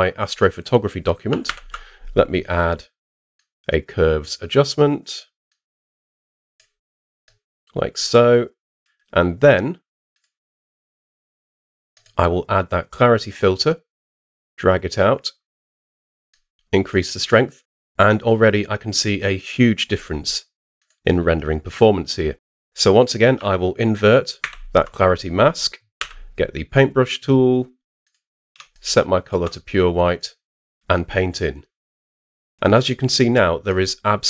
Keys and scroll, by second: 1.4 super+m, 24.4 super+i, 26.0 b.